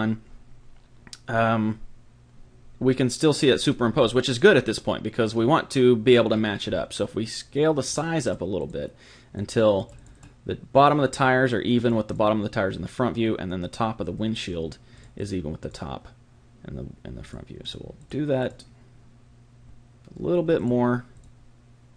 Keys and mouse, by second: 3.7-7.9 middle drag, 7.9-14.0 drag, 14.9-20.2 drag, 20.5-21.9 drag.